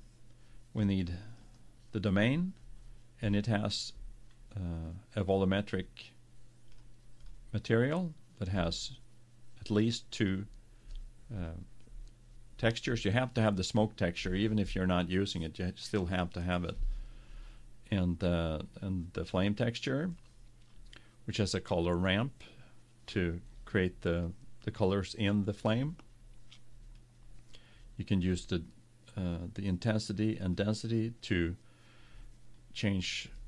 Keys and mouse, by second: 1.0 click, 1.7-3.6 drag, 5.4-10.7 drag, 27.1-29.0 drag, 30.9-32.8 drag.